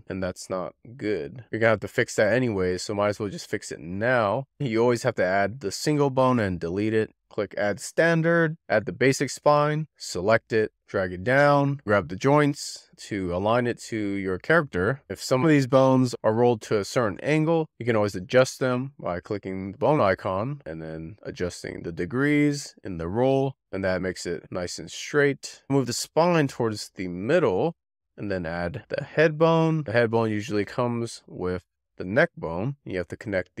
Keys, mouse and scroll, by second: 0.9 click, 3.7-6.2 drag, 7.1 x, 8.5 click, 9.8 shift+middle click, 10.6 click, 10.8 scroll up 3, 10.8 shift+middle click, 11.0 scroll down 2, 11.1 shift+middle click, 11.2 click, 11.7 click, 11.8 click, 12.4 click, 12.5 click, 13.0 click, 13.6 click, 13.9 click, 14.1 click, 14.3 click, 14.5 click, 15.6-17.2 drag, 17.7-19.2 drag, 19.8 click, 21.4 click, 21.5 click, 21.7 click, 22.6 click, 22.7 click, 25.5 shift+middle click, 26.3 click, 26.9 click, 28.0 click, 28.0 scroll down 4, 28.2-28.6 scroll up 5, 28.6 scroll down 1, 28.6 shift+middle click, 28.9 click, 29.1-29.5 Left, 29.8 scroll up 4, 30.0 Left, 30.3 Left, 30.6 click, 31.0 click, 31.2-31.7 click, 31.4 click, 32.3 scroll up 5, 32.6 shift+s, 32.9 click.